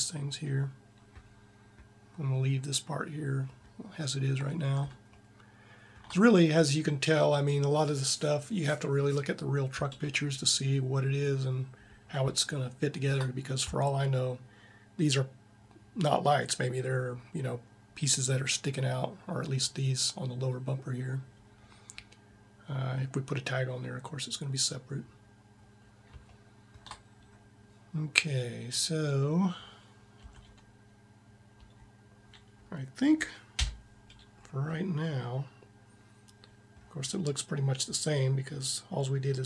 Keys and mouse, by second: 5.0 middle click, 5.8 click, 30.0 a, 31.3 Tab, 33.3 z, 37.0 middle click.